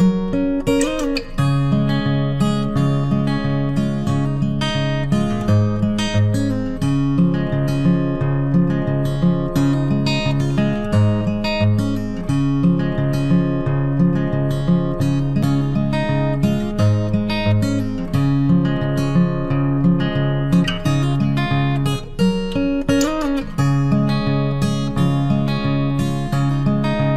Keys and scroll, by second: 8.6 ctrl+t, 18.8 ctrl+t.